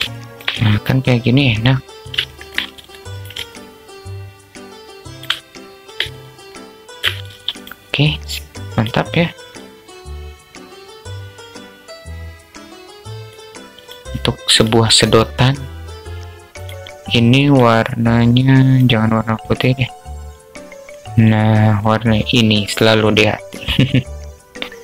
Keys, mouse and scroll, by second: 1.8 alt+shift+click, 2.8-4.6 alt+shift+drag, 5.5 shift+click, 8.0-8.4 drag, 10.2-12.8 drag, 13.1 click, 14.0 click, 15.9 click, 16.8 click, 18.0 click.